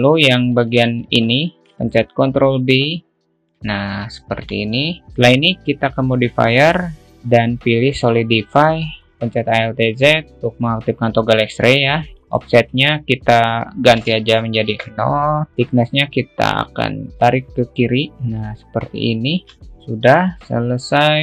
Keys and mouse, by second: 0.0 alt+middle click, 1.0 click, 1.2 alt+click, 1.4 shift+middle click, 2.0 ctrl+b, 4.5 alt+middle click, 6.9-10.3 drag, 10.3 alt+z, 12.7-15.5 drag, 17.1-19.5 drag, 19.7-20.7 alt+middle drag.